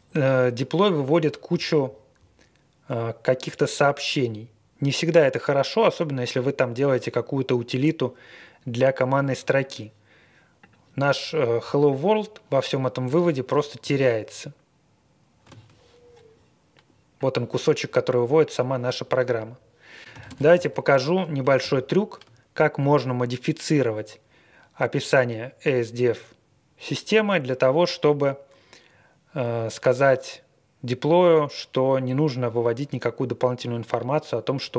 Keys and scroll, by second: 13.2 ctrl+w, 13.5 ctrl+w, 13.9 ctrl+w, 19.9-21.0 typing, 21.7 ctrl+l, 22.9 Return.